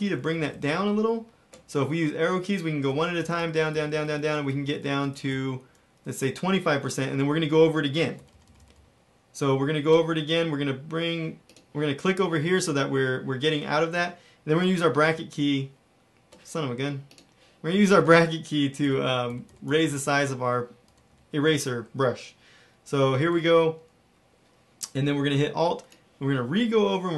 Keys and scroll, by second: 7.2 Down, 8.3 ], 8.4 ], 8.5 ], 8.7 ], 15.0 ], 18.8-19.8 typing, 20.8 ], 21.0 ], 21.4 [, 23.3 [.